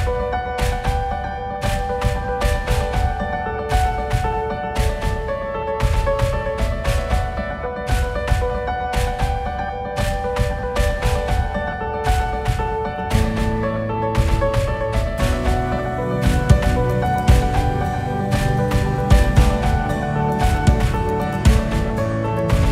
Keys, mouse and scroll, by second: 0.4-1.9 KP_6, 2.3 KP_3, 3.9 g, 6.5 KP_1, 11.4 click, 13.0-15.2 drag, 16.6 click, 17.2 click.